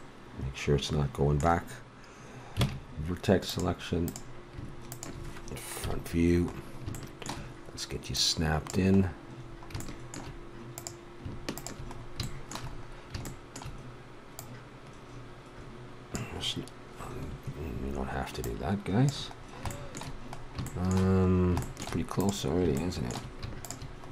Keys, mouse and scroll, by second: 2.6 ctrl+Tab, 5.8 KP_1, 6.4 click, 8.1-10.0 drag, 10.7-12.4 right drag, 12.4 click, 12.7 middle click, 12.9 click, 13.1 middle click, 14.3-16.2 drag, 18.4-20.3 drag, 20.3 middle click, 22.2-24.1 right drag.